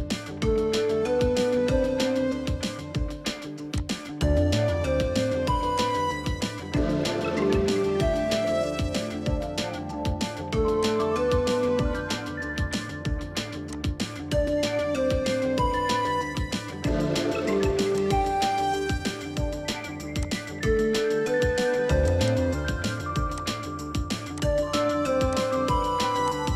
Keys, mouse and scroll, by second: 4.6-5.0 scroll down 1, 16.3-17.0 scroll down 1, 17.0 middle click, 19.3-21.0 scroll up 1, 22.3 double click, 23.2 3.